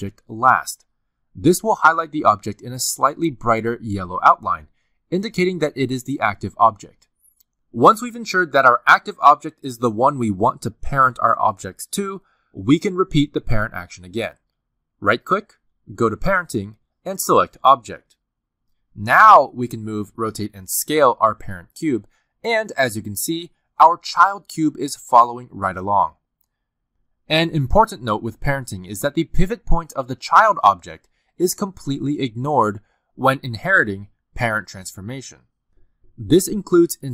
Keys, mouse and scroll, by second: 1.2 click, 2.1 shift+click, 3.6 click, 4.1 click, 4.6 shift+click, 14.6 right click, 20.7 click, 21.5 g, 22.4 s, 23.4 r, 25.6 r, 28.3 g, 29.4 s, 30.6 r.